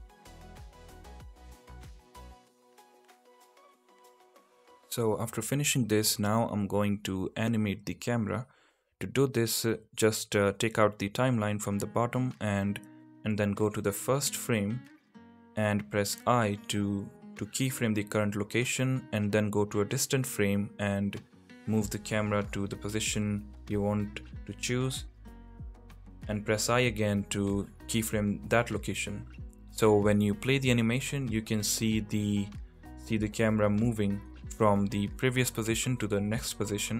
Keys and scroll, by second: 0.0 p, 0.7 Tab, 3.7 Tab, 4.2 l, 4.4 p, 4.9 Tab, 31.3 space, 36.3 space.